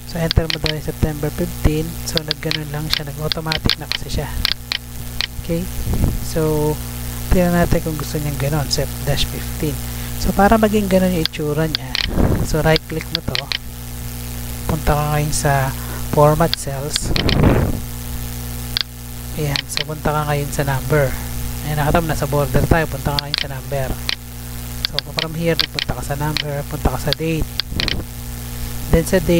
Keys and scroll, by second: 5.7 Tab, 10.2 Tab.